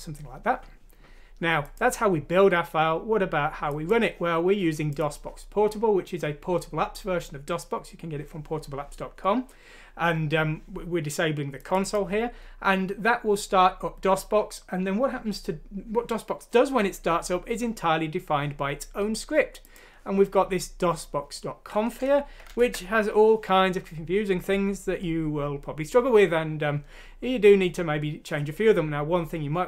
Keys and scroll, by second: 22.5 ctrl+Home.